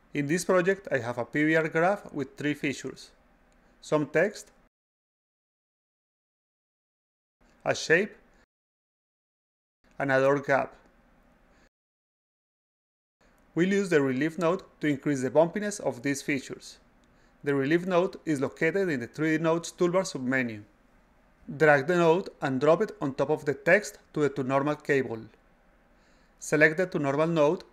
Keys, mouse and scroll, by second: 4.3 click, 4.4 click, 6.1 click, 6.3 click, 7.4 click, 7.6 click, 8.7 click, 8.9 click, 9.9 click, 10.1 click, 11.4 click, 11.6 click, 13.2 click, 13.4 click, 16.1 click, 16.3 click, 18.7 click, 22.7-24.0 drag, 24.5 click.